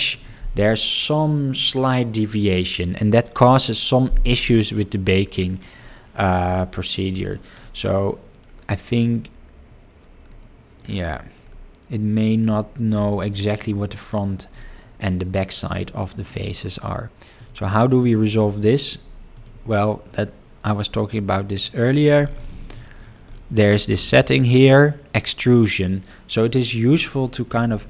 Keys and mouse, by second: 10.8 middle click, 13.4 middle click, 13.9 middle click, 15.2 middle click, 15.8 middle click, 17.3 click, 18.0 click, 19.3 ctrl+click, 21.5 click, 26.9-27.8 drag.